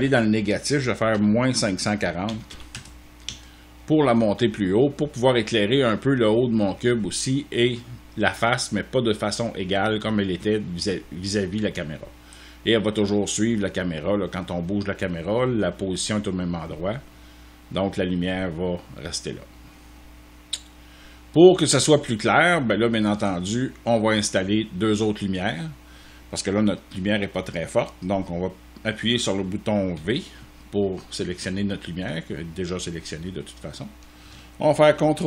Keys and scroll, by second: 1.0-3.1 typing, 3.1 Return, 29.8 v, 35.1 ctrl+d.